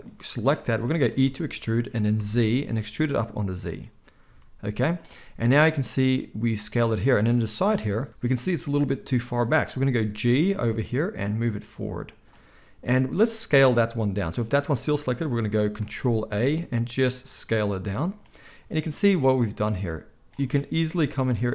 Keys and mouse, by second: 0.0-3.7 drag, 1.0 e, 3.7-14.3 middle drag, 4.2 z, 10.1 g, 14.3-18.1 drag, 16.3 ctrl+a, 18.1-19.7 middle drag, 19.7-21.5 drag, 21.0 g.